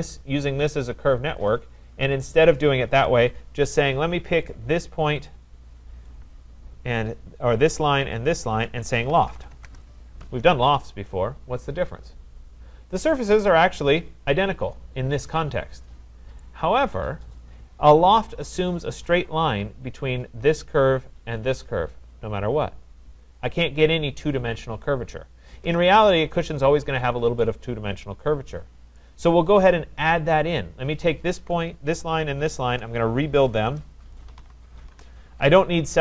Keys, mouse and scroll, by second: 1.5 click, 2.1 click, 3.0 Delete, 4.4 click, 5.3 click, 7.1 shift+click, 8.2 click, 8.9-10.0 typing, 10.6 Return, 13.0-13.7 typing, 13.0 scroll, 16.4 right click, 16.8-17.4 scroll, 23.4 click, 25.7 Delete, 26.7 middle click, 26.8 middle click, 28.6-29.0 scroll, 29.0 right click, 30.4 click, 32.4 shift+click, 33.6 Return, 34.0-34.9 typing.